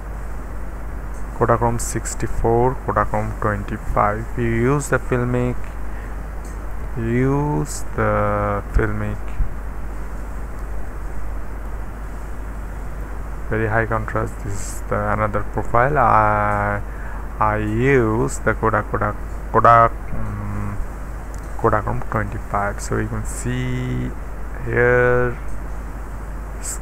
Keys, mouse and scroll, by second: 0.0 Up, 0.6 Up, 2.2 Up, 3.8 click, 5.4-6.5 scroll down 1, 6.5-7.3 scroll up 4, 8.7 click, 11.6 click, 12.9 click, 15.9 click, 17.1-19.0 scroll down 2, 19.0-21.3 scroll down 1, 22.0 click, 25.6-26.6 scroll up 1.